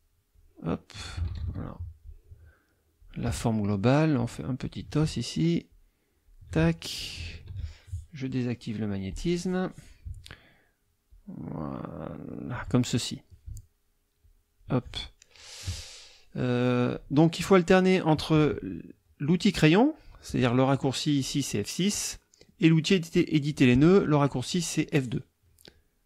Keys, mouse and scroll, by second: 0.3-1.3 drag, 1.3 ctrl+z, 2.0-3.2 drag, 4.2-4.9 shift+drag, 5.7-6.5 shift+drag, 6.9-7.4 shift+drag, 9.1 click, 11.1-12.7 shift+drag, 14.2-14.8 shift+drag, 21.2 click, 24.5 click.